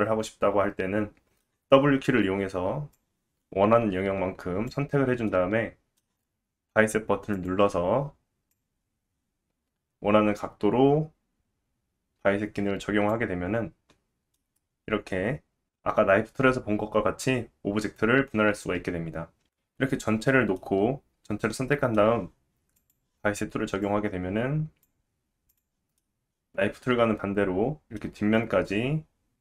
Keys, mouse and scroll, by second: 2.9-25.6 drag, 5.3 middle click, 14.3 middle click, 16.8-17.5 scroll up 3, 18.0-18.5 scroll down 2, 19.4 ctrl+z, 19.4 Tab, 19.4 a, 20.6 middle click, 25.6-28.5 middle drag, 28.1-28.7 scroll up 2.